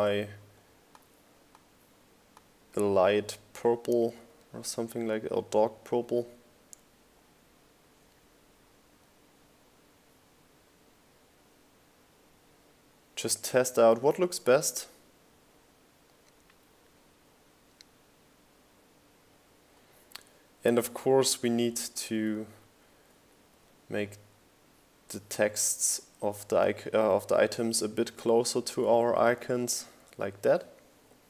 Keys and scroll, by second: 15.8 shift+Left, 16.7 Left, 21.2 Left, 22.7 Right.